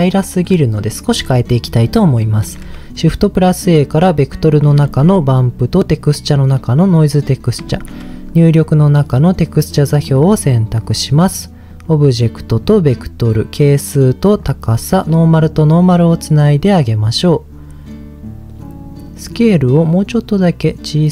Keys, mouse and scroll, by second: 0.5-1.4 scroll down 2, 1.4 middle click, 2.4 shift+a, 4.8 shift+a, 7.6 shift+a, 10.2 middle click, 10.4-10.8 scroll up 2, 10.8 click, 11.7 click, 12.6 click, 13.6 click, 14.7 click, 15.8 click, 19.3-21.1 drag.